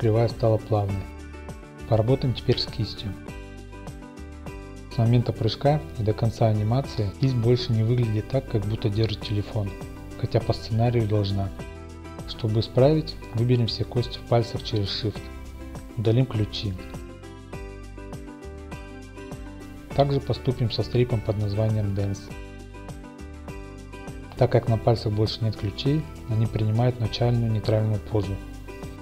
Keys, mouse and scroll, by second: 2.5-3.6 drag, 3.6 click, 3.9 Tab, 4.0 click, 5.6-6.7 drag, 8.3-9.5 drag, 9.5-10.8 middle drag, 10.8-11.9 drag, 13.1 click, 13.2 Home, 13.3-13.8 scroll, 13.8 middle click, 13.9-14.9 middle drag, 13.9-14.4 scroll up 1, 14.9 click, 15.5 middle click, 17.1 click, 17.3 Tab, 17.8 middle click, 17.8-18.6 scroll up 2, 18.6 x, 19.0 click, 21.1 click, 21.6 Tab, 22.0 click, 22.7 Tab, 23.3 shift+x, 23.8 click, 24.6-26.4 drag, 27.7-29.0 drag.